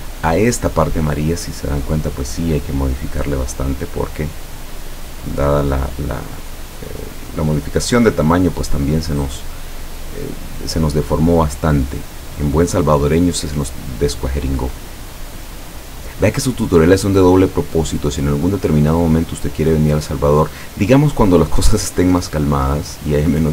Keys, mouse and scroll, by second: 0.5 click, 1.4 click, 3.5-4.8 drag, 6.0-7.7 drag, 8.2-9.5 drag, 12.8-14.3 drag, 17.9-20.1 drag, 20.5 click, 21.2-23.2 drag.